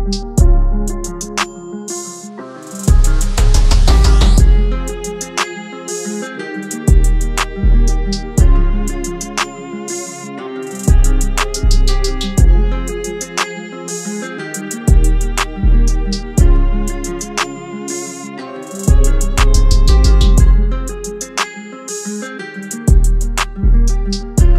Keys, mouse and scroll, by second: 4.1 e, 8.0 double click.